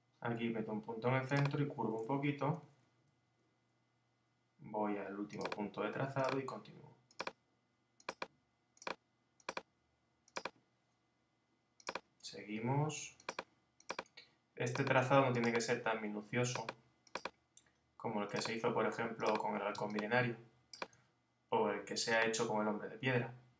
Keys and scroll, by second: 2.3 Right, 2.6 Down, 3.1 Right.